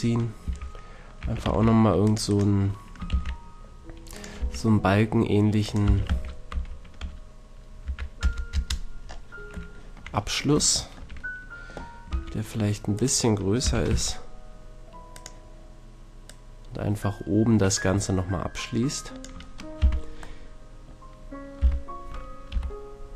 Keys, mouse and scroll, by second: 0.4 a, 1.2 a, 1.5 c, 3.1 shift+d, 4.3 r, 5.8 r, 12.1 s, 13.0-14.8 drag, 13.6 g, 15.3-18.0 drag, 18.1-19.8 drag, 19.8 z, 21.6 middle click, 21.6 z, 22.5 KP_3.